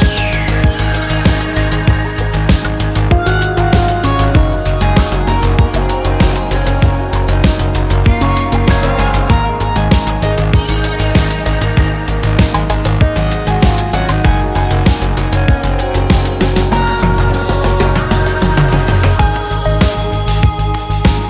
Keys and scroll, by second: 2.7 e, 4.4 x, 5.2 x, 5.7 ctrl+z, 6.4 x, 6.7 ctrl+z, 7.8 F2, 8.7 ctrl+z, 8.9 x, 9.2 ctrl+z, 9.4 x, 9.8 ctrl+z, 10.9 ctrl+z, 12.0 space, 12.7 x, 12.9 space, 13.8 space, 16.2 g, 20.1 space, 20.9 ctrl+u.